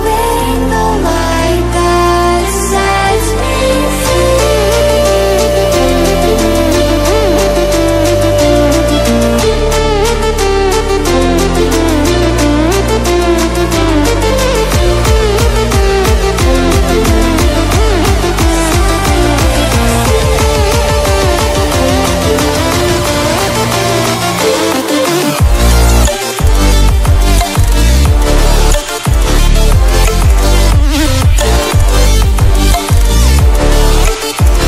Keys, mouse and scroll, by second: 12.9 ctrl+w, 16.3 ctrl+w, 17.7 click, 18.3 scroll down 1, 18.9-19.3 scroll up 1, 19.7-21.9 drag, 21.9 ctrl+z, 22.5 click, 28.5 ctrl+z, 29.2 click, 32.6 right click, 33.7 click.